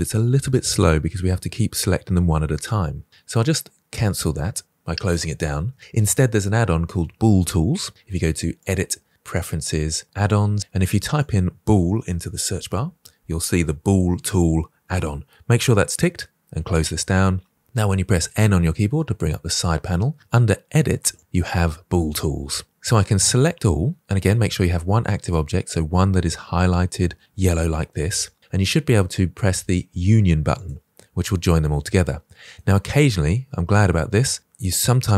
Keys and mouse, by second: 3.9 click, 8.5-9.3 drag, 18.3 n, 29.8 click, 31.1-35.1 middle drag.